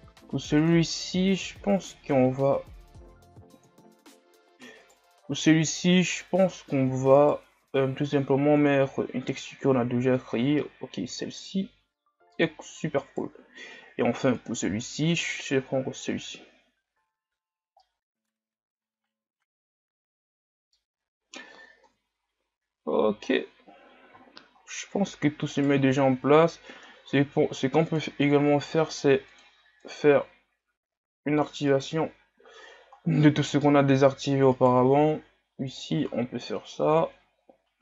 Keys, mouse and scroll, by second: 5.8-9.7 right drag, 9.7-10.7 drag, 10.7-13.2 middle drag, 13.2-15.5 right drag, 15.5-16.4 drag, 16.4 a, 16.9-17.9 scroll down 5, 17.9-22.0 middle drag, 22.0 KP_1, 22.8-23.2 scroll down 1, 23.2 shift+scroll up 5, 23.9 scroll up 6, 24.2-24.7 shift+scroll down 10, 25.7-29.4 right drag, 29.4-30.7 drag, 30.7 scroll down 4, 31.8 right click, 33.1-33.6 scroll down 2, 33.8-34.6 scroll up 3, 34.6 right click, 35.8-36.9 drag, 36.9 a, 37.5 scroll down 1.